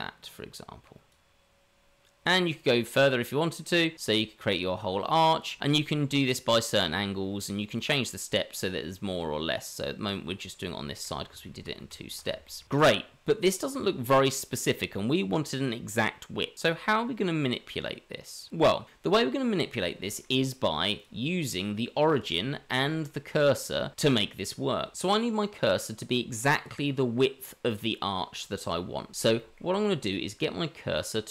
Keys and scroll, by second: 11.8 ctrl+z, 22.3 Tab.